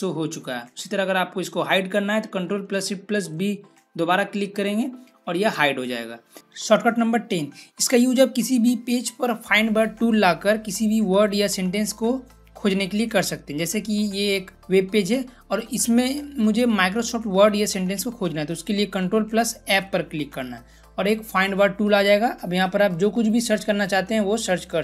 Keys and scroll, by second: 3.1 ctrl+shift+b, 19.4 ctrl+f, 22.7-24.8 typing.